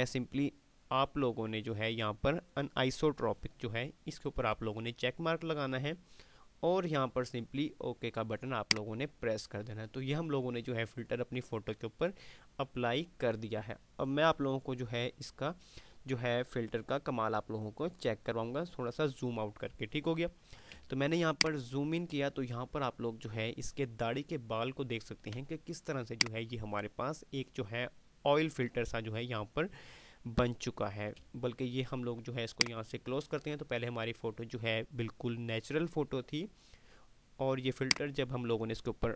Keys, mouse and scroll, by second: 8.4 click, 21.1 ctrl+click, 21.5 ctrl+space, 25.9 click, 29.5 space, 32.4 click, 38.1 click.